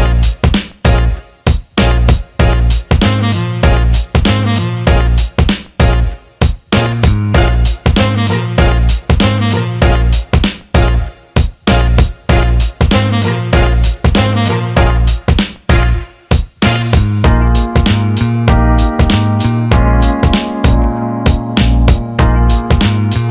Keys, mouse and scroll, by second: 0.4 click, 1.2 alt+shift+middle click, 3.4 click, 4.5-6.0 shift+drag, 6.5-9.3 shift+drag, 11.8 click, 12.2 click, 13.3 click, 13.7 click, 14.6 click, 19.6 click, 20.7-22.2 alt+middle drag.